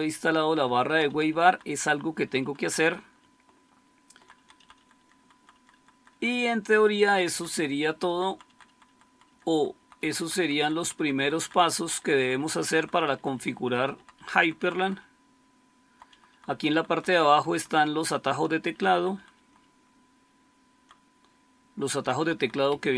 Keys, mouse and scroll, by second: 0.5 Down, 0.9 Down, 1.0 Down, 1.2 Down, 1.4 Down, 1.6 Down, 1.8 Down, 2.0 Down, 2.1 Down, 2.3 Down, 2.5 Down, 2.7 Down, 2.9 Down, 3.1-4.1 Down, 4.3 Down, 4.6 Down, 4.9 Down, 5.1 Down, 5.3 Down, 5.4 Down, 5.6 Down, 5.8 Down, 6.0 Down, 6.2 Down, 6.6 Down, 6.8 Down, 7.0 Down, 7.2 Down, 7.4 Down, 7.6 Down, 7.8 Down, 8.0 Down, 8.1 Down, 8.6 Down, 8.8 Down, 8.9 Down, 9.2 Down, 9.4 Down, 9.7 Down, 9.9 Down, 10.1 Down, 10.2 Down, 10.7 Down, 10.9 Down, 11.0 Down, 11.3 Down, 11.5 Down, 11.7 Down, 11.8 Down, 12.1 Down, 12.2 Down, 12.7 Down, 12.8 Down, 13.1 Down, 13.2 Down, 13.5 Down, 13.6 Down, 13.9 Down, 14.0 Down, 14.3 Down, 14.6 Down, 14.9 Down, 15.0-15.8 Down, 16.2 Down, 16.4 Down, 16.6 Down, 16.8 Down, 16.9 Down, 17.2 Down, 17.4 Down, 17.6 Down, 17.8 Down, 18.2 Down, 18.4 Down, 18.7 Down, 18.8 Down, 19.0 Down, 19.2 Down, 19.4-20.7 Down, 21.9 Down, 22.1 Down, 22.3 Down, 22.6 Up, 22.8 Up.